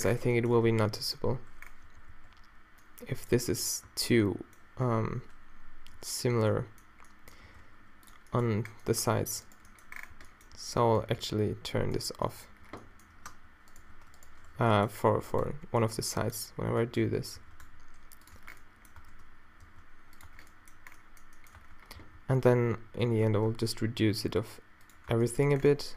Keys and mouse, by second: 0.7 a, 1.9 z, 2.9 b, 3.9 b, 5.0 z, 7.5 shift+e, 10.2 z, 10.6 b, 12.5 z, 13.3 space, 13.8 z, 14.6 z, 15.4-16.5 drag, 15.7 b, 17.4 shift+e, 18.4 Tab, 19.0 Tab, 19.7 shift+e, 20.3 Tab, 21.6 Tab, 22.0 a, 22.2 a, 23.5 shift+e, 25.1 Tab.